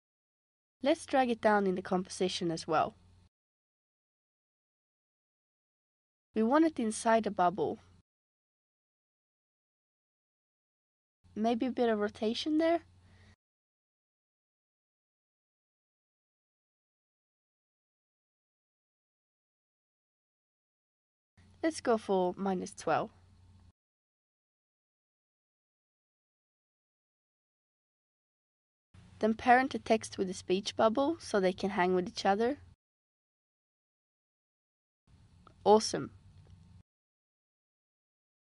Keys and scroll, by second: 12.0 r, 21.3-22.5 typing, 34.4 space.